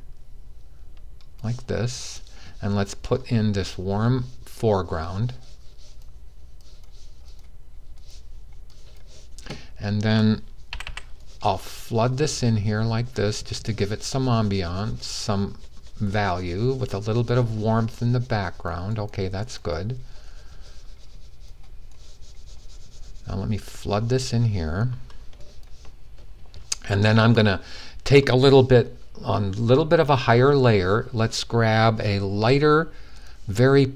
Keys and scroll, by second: 10.4 typing.